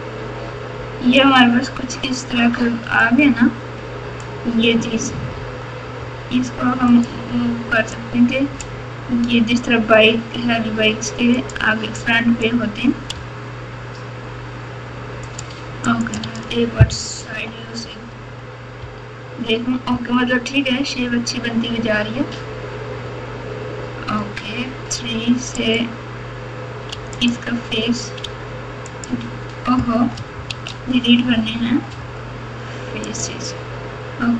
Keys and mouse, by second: 2.5 1, 3.0-4.2 drag, 5.3 g, 8.1 click, 9.5 g, 12.1 click, 13.1 g, 15.8 click, 16.2 alt+z, 17.2 KP_4, 17.5 KP_4, 17.7 KP_4, 18.8 KP_8, 25.6 click, 26.9 3, 27.2 click, 28.2 x, 30.4 ctrl+z, 31.9 x.